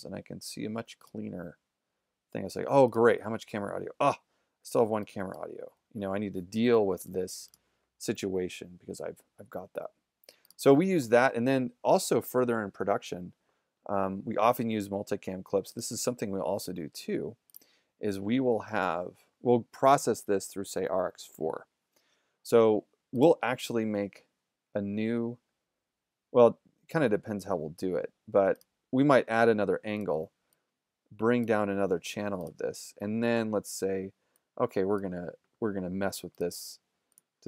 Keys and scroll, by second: 4.9 z.